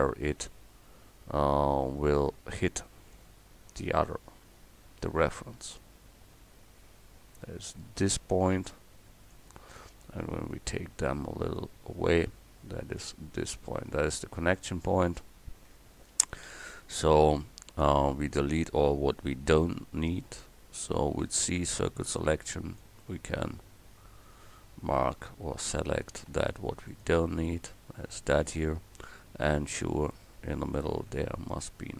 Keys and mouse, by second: 3.2 g, 10.4-11.6 drag, 11.6-13.0 middle drag, 13.0-16.7 drag, 19.6 a, 20.3 middle click, 21.2 c, 26.1-27.9 drag, 26.3 x, 28.4 click, 31.2 x.